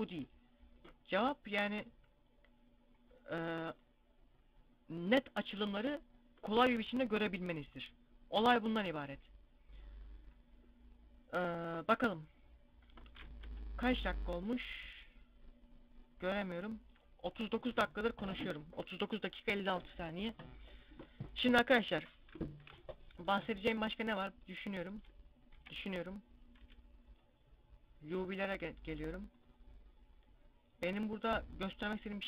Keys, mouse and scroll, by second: 3.6 right click, 9.4-10.5 scroll down 1, 12.8-13.3 scroll down 2, 13.3 Tab, 19.5 click, 23.4 middle click, 25.4 KP_Divide, 25.8 scroll down 1, 26.9 click, 26.9 scroll down 1.